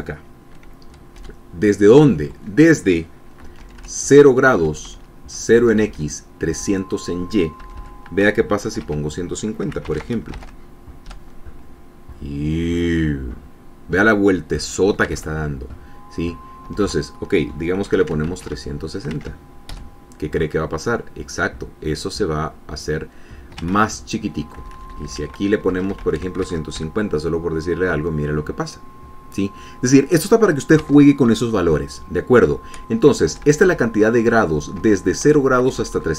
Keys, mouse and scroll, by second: 1.8 Down, 4.2 Right, 5.3 Right, 6.2 Right, 7.2 Left, 8.2 Delete, 9.4 KP_1, 9.5 KP_5, 10.5 ctrl+s, 11.1 ctrl+alt+Tab, 11.7 F5, 15.8 alt+Tab, 17.3 BackSpace, 18.4 KP_3, 18.6 KP_6, 18.9 ctrl+s, 19.8 alt+Tab, 20.4 alt+F5, 24.3 alt+Tab, 25.2 Left, 26.3 KP_1, 26.4 KP_5, 26.7 ctrl+s, 27.2 ctrl+alt+Tab, 27.4 ctrl+alt+F5, 31.5 alt+Tab, 33.9 Left, 35.5 Right, 35.9 Down.